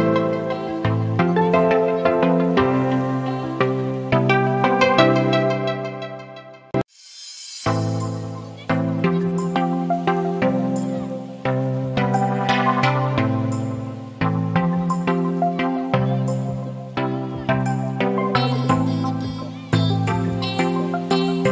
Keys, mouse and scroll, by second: 0.5-2.1 drag, 4.2-5.5 alt+shift+drag, 8.6-16.7 drag, 12.8-15.9 a, 16.7-18.6 alt+shift+drag.